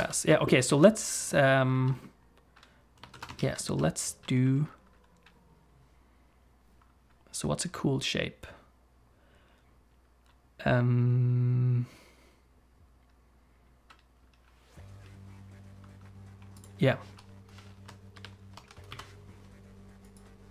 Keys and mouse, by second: 0.0 ctrl+space, 0.7 ctrl+s, 3.2 ctrl+s, 3.4 shift+a, 18.2 shift+h, 18.9 KP_Decimal, 20.1 click.